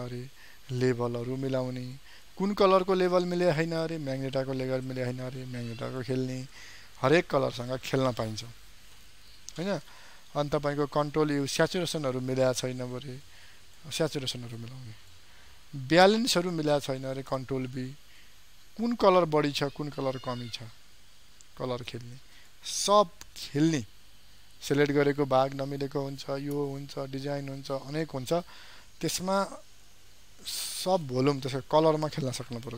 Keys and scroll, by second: 11.3 ctrl+u, 17.3 ctrl+b.